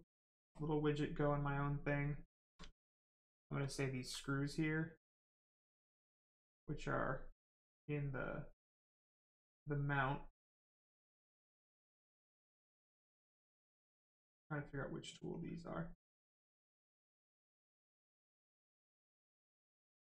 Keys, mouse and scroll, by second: 1.6 right click, 2.6 alt+right click, 3.6 alt+click, 9.9 click, 15.3 click.